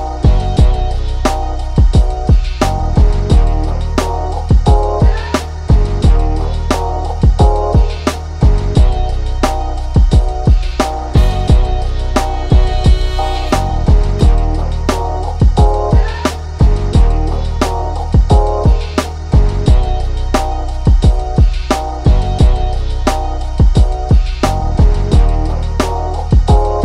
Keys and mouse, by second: 1.8 click, 3.2 click, 5.2 ctrl+z, 5.5 click, 8.1 click, 8.9 right click, 9.3 click, 12.2-15.7 shift+drag, 15.7 ctrl+z, 16.0-17.9 shift+drag, 22.5 right click, 22.8-26.8 drag.